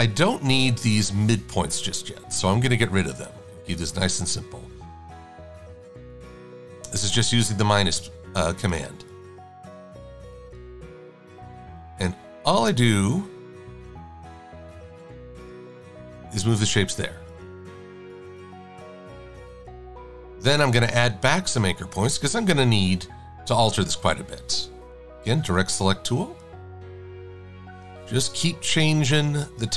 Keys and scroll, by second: 0.6 -, 8.1 a, 25.2 a.